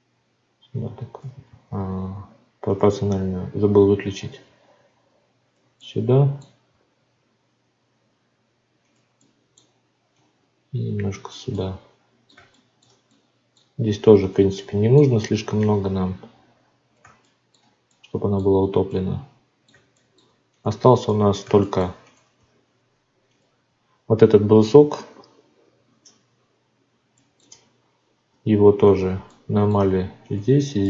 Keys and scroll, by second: 1.4 ctrl+z, 22.3 Tab, 27.4 Tab.